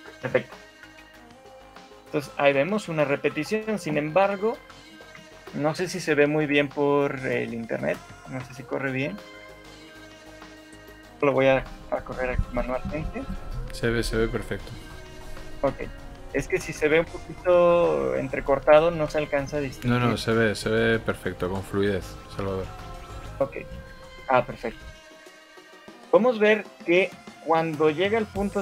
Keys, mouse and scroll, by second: 2.7 scroll up 3, 2.9 middle click, 3.7 middle click, 4.3 KP_1, 4.9 shift+middle click, 5.5 Escape, 8.2 Right, 8.4 Right, 8.6 Right, 9.0-12.8 Right, 13.0 Right, 13.4 shift+Left, 13.8 Right, 14.0 Right, 14.2 Right, 14.4 Right, 14.8 Right, 15.0 Right, 15.2 Right, 15.4 Right, 15.8 Right, 16.0 Right, 16.4 Right, 17.0 Right, 17.4 Right, 17.6 Right, 17.8 Right, 18.2 Right, 18.4 Right, 18.6 Right, 18.8-20.2 Right, 20.4 Right, 22.8 shift+Left, 24.2 shift+middle click, 24.6-25.0 scroll up 3, 25.0 shift+middle click, 25.8 shift+middle click, 26.4 scroll down 4, 27.6 right click.